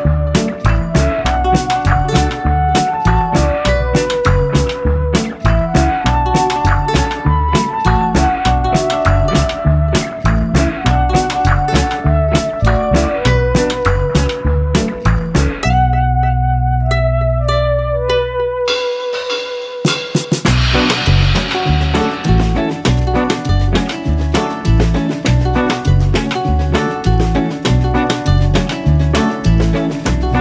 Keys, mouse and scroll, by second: 1.4 click, 3.5 x, 6.9 shift+g, 13.3 right click, 16.3 r, 22.9 click, 24.8 shift+g, 27.6 right click.